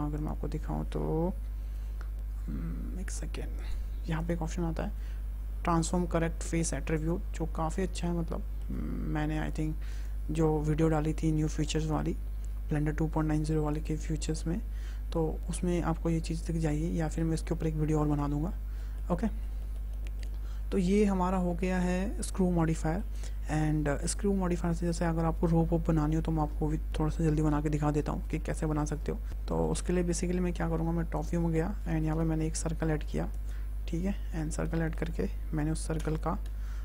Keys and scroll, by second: 1.3 Tab, 14.0 Tab, 24.0 Delete, 28.8 `, 30.6 `, 31.9 shift+a, 35.8 Tab.